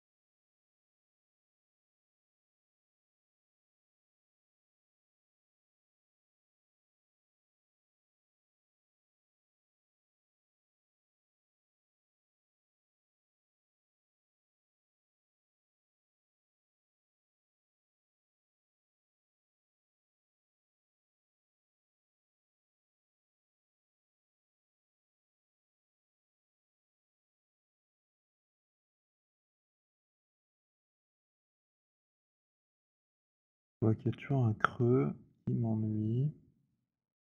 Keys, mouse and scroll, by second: 2.6 middle click, 5.0 alt+click, 7.0 alt+click, 9.4 click, 10.2 z, 12.5 click, 13.1 click, 14.2 shift+click, 16.9 right click, 18.1 right click, 18.4 z, 18.9 z, 20.8 right click, 22.2 alt+click, 23.4 click, 25.7 click, 28.0 click, 30.2 alt+click, 32.8 alt+click.